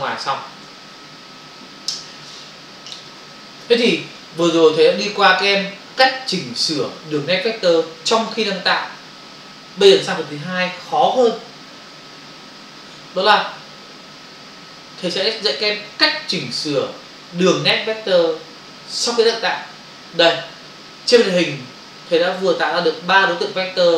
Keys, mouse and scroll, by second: 0.0 ctrl+click.